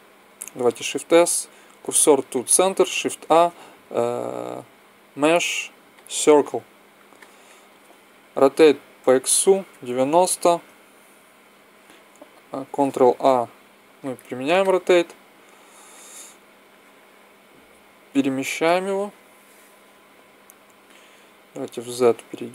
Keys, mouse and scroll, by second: 0.7 shift+s, 3.1 shift+a, 8.2 r, 13.0 ctrl+a, 16.6 click, 20.5 middle click, 21.3 z.